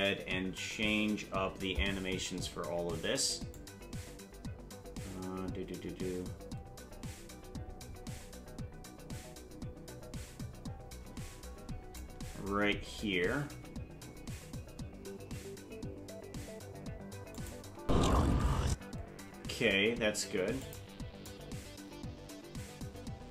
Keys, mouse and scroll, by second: 1.8-2.4 scroll down 9, 3.6-12.0 drag, 13.4 g, 17.8 space, 18.7 space, 20.6 click, 21.2-23.3 drag.